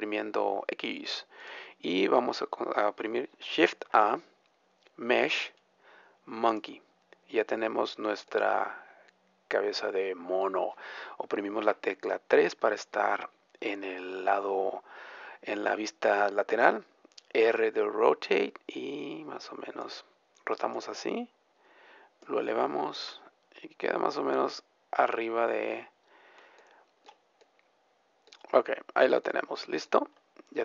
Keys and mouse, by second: 1.4-3.8 middle drag, 3.9 shift+a, 7.3-11.3 drag, 9.4-11.3 right drag, 11.3 middle click, 11.6 click, 11.8 KP_3, 17.6 r, 20.6-22.6 drag, 22.9 r, 26.4-30.6 middle drag.